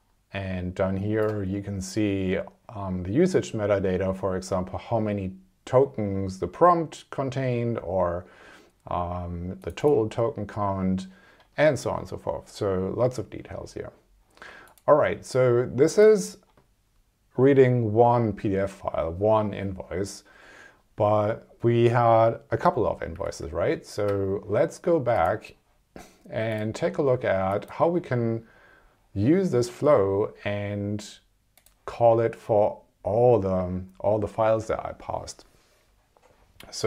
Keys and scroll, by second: 23.2 super+Tab.